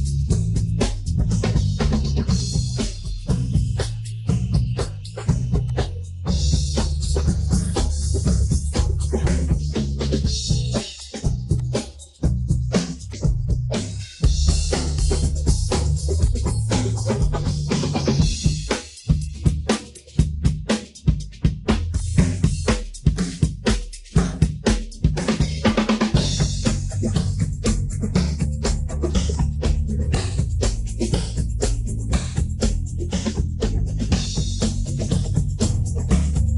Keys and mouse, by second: 3.0 Tab, 3.3 middle drag, 4.8 middle click, 5.6-6.9 drag, 7.2 middle click, 7.7 click, 8.4 middle click, 9.7 click, 10.1 middle click, 11.5 alt+click, 11.9-12.4 middle drag, 13.1 alt+shift+click, 13.4 middle click, 14.4 middle click, 14.9 KP_1, 15.6 KP_3, 16.2-18.7 drag, 18.9-19.5 middle drag, 19.9-21.0 middle drag, 21.2 middle click, 21.9-23.5 drag, 23.8 middle click, 24.4 middle click, 25.5 middle click, 26.6 click, 27.5 middle click, 28.5 Tab, 28.9 middle drag, 29.3 click, 29.5-30.7 middle drag, 32.1 Tab, 32.8-34.4 right drag, 34.5 middle click, 35.4 middle click, 36.0 middle click.